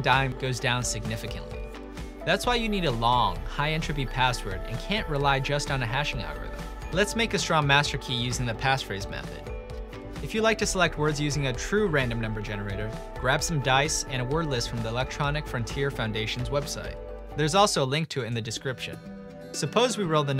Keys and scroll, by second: 7.3 typing, 10.0-13.3 typing, 18.6-20.3 typing.